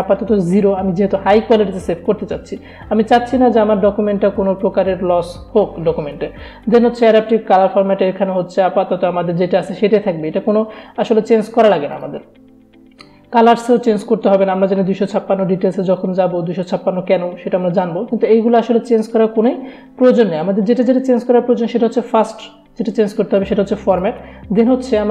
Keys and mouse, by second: 7.1 click, 12.0 click, 23.4 click.